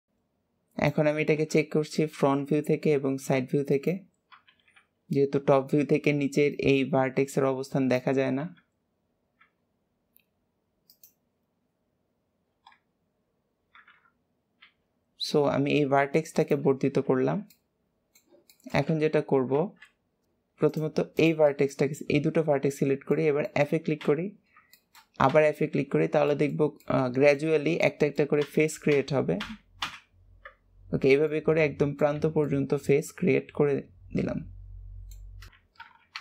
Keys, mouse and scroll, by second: 2.3 e, 6.5 click, 9.3 e, 13.8 KP_1, 14.5 e, 16.7-17.1 scroll down 2, 17.1 alt+z, 17.4-18.8 middle drag, 18.8 alt+z, 19.2 scroll up 1, 20.2 click, 20.6 click, 21.1 shift+click, 21.6-23.9 middle drag, 23.9 f, 24.4 scroll down 2, 24.6 shift+middle click, 25.2 f, 26.2-28.3 shift+middle drag, 28.3 f, 30.3-30.7 scroll up 1, 30.7-31.1 scroll down 2, 31.2 middle click, 32.1 Tab, 32.4-35.3 middle drag, 35.3 scroll down 2, 35.5 KP_1, 36.1 Tab.